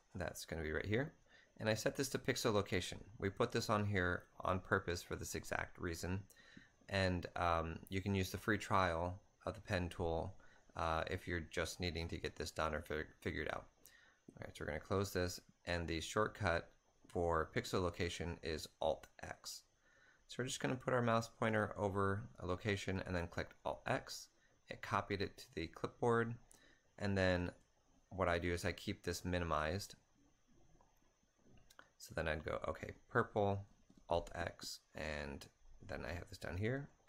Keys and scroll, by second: 22.3 alt+Tab, 27.2 a, 27.7 alt+Tab, 33.6 a, 33.7 alt+x, 36.7-37.0 typing.